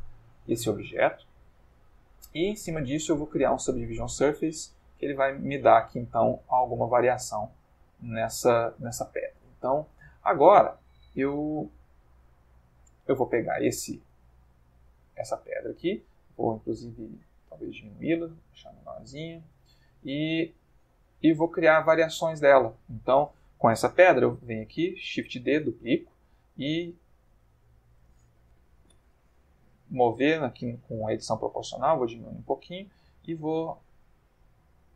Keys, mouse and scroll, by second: 1.5 click, 2.3 click, 3.5 click, 4.2-5.6 middle drag, 6.9-10.4 drag, 12.3-14.0 middle drag, 14.4-14.9 ctrl+middle drag, 14.9-15.6 ctrl+middle drag, 16.3 s, 18.5 click, 18.9-20.3 ctrl+middle drag, 20.9 click, 21.9 shift+middle click, 22.5 ctrl+shift+middle click, 24.4 shift+d, 25.4 click, 25.6 Tab, 26.9 click, 27.4 g, 28.9 g, 30.4-30.8 scroll up 2, 30.9-31.6 scroll up 2, 32.2 click, 32.7 click, 33.0 g, 33.7 click, 34.0 click, 34.3 g.